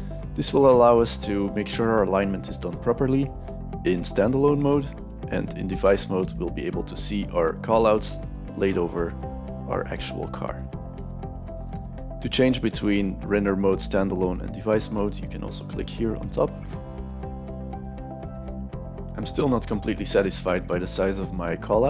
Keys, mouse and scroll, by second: 16.2 click, 17.4 click, 18.1 click, 21.4-21.8 alt+right drag.